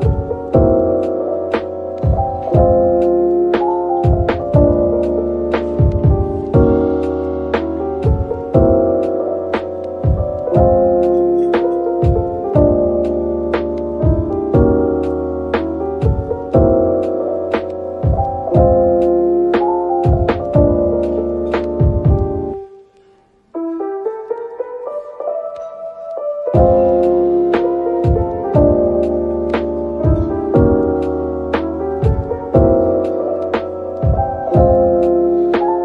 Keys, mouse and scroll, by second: 11.1 typing, 13.8 typing, 32.5 typing, 33.8 typing, 34.9-35.4 typing.